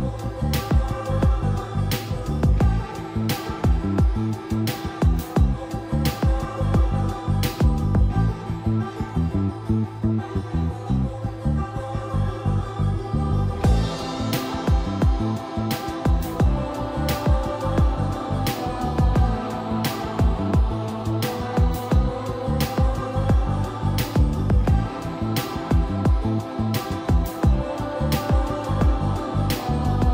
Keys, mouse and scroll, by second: 1.4 shift+middle click, 2.0-2.3 scroll up 1, 3.0 middle click, 3.8 click, 5.1 right click, 5.5 click, 6.0 Escape, 6.5 click, 7.1 Escape, 7.6 click, 8.0 right click, 8.7 click, 10.8-11.2 scroll up 1, 11.3 typing, 12.8 click, 13.1-14.9 typing, 15.2 click, 16.3 Escape, 16.7-17.7 typing, 18.1-24.3 drag, 27.9 typing, 28.6 click.